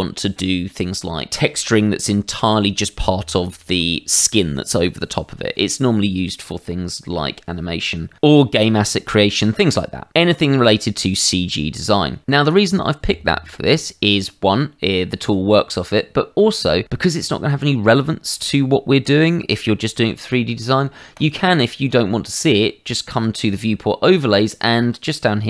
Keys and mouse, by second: 21.1 click.